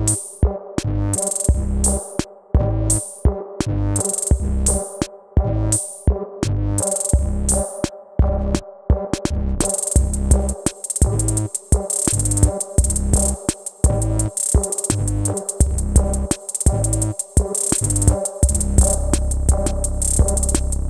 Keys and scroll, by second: 14.4 ctrl+z.